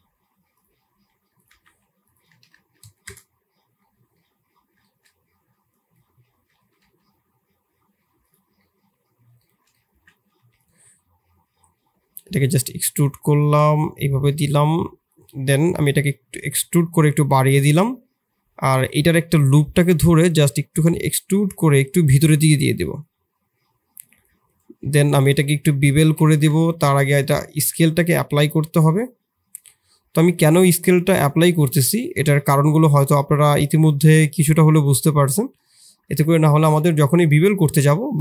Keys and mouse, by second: 0.9 s, 1.4 g, 2.2 r, 3.8 middle click, 4.2 middle click, 4.8 shift+middle click, 5.7 click, 6.3 s, 8.5 middle click, 9.9 Tab, 10.3 3, 12.0 i, 13.5 i, 15.8 e, 18.7 click, 19.3 3, 20.6 e, 22.9 click, 23.3 2, 26.7 Tab, 27.0 ctrl+a, 27.7 Tab, 29.5 click, 30.5 click, 31.9 shift+click, 32.9 shift+click, 36.0 Tab, 36.7-37.3 middle drag, 38.1-38.2 middle drag.